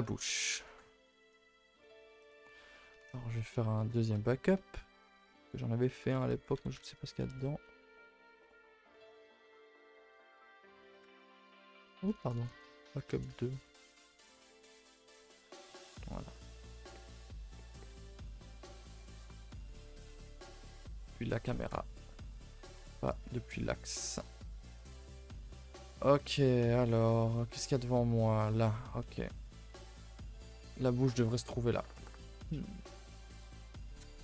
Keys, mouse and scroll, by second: 0.0 a, 0.1 click, 0.4 ctrl+s, 0.5-0.8 middle drag, 0.8 scroll down 1, 0.9 a, 1.1 a, 2.1 click, 2.9 a, 3.1-3.4 shift+middle drag, 3.4-3.8 scroll down 1, 3.8 shift+d, 4.7 m, 9.7 click, 11.3 click, 11.5 click, 12.3 BackSpace, 12.4 BackSpace, 15.0 click, 15.4 a, 15.6 a, 15.9 ctrl+s, 16.8 click, 17.2-17.7 middle drag, 17.7-18.2 scroll up 1, 18.4 KP_1, 18.8 z, 20.0 KP_0, 20.5 a, 20.6 a, 20.9 shift+s, 21.7-22.4 scroll down 8, 22.0 ctrl+s, 22.4 shift+middle click, 22.5-23.1 scroll up 2, 23.1 click, 23.2 Tab, 23.6 z, 24.3 shift+middle click, 24.6 scroll up 2, 24.7 a, 24.8 a, 25.1 middle click, 25.9 click, 31.2 click.